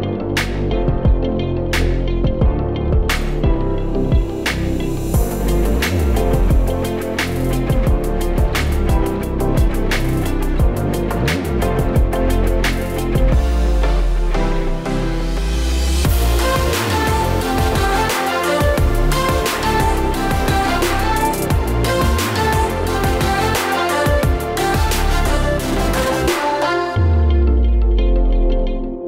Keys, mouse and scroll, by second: 0.4 click, 1.9 shift+a, 3.6 middle click, 4.0-4.6 scroll down 2, 4.6 click, 5.3 click, 6.2 click, 6.7 click, 7.6 middle click, 8.8 click, 9.0 typing, 9.5 middle click, 10.4 click, 10.8 typing, 11.6 click, 12.2 click, 13.1 click, 13.8 KP_0, 14.6 click, 15.4 s, 16.4 click, 16.7 s, 17.9 click, 18.7 click, 19.1 click, 19.6 shift+a, 22.7 r, 24.2 Tab, 24.6-26.9 typing, 28.0 Tab, 28.7 a.